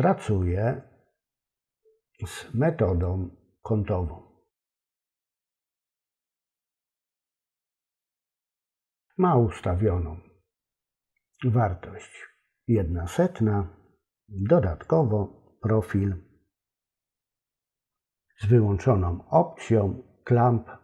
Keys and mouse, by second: 2.9-5.8 drag, 14.9 click.